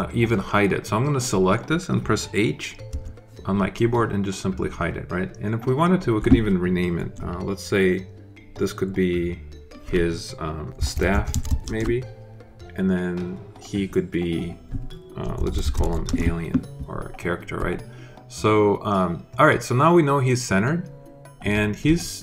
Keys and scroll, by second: 2.8 h, 10.4-11.7 typing, 15.0-16.1 typing.